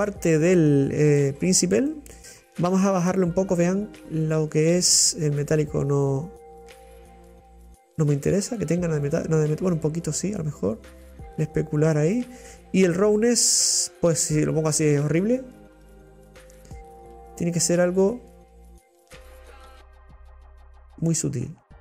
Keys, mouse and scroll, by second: 5.7-8.4 drag, 9.8 click, 10.9 click, 13.6-15.9 drag, 17.6-20.4 middle drag, 20.4 click, 21.2-21.8 middle drag.